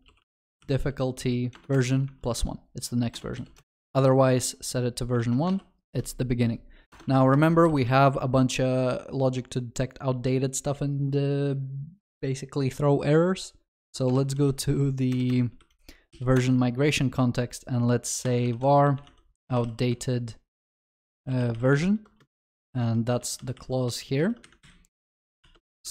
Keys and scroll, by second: 0.5 Return, 5.2 ctrl+alt+shift+l, 7.4 ctrl+alt+shift+l, 7.7 ctrl+s, 13.9 ctrl+shift+n, 23.2 Escape, 23.2 ctrl+w, 24.2 ctrl+x, 25.4 ctrl+v, 25.5 ctrl+s.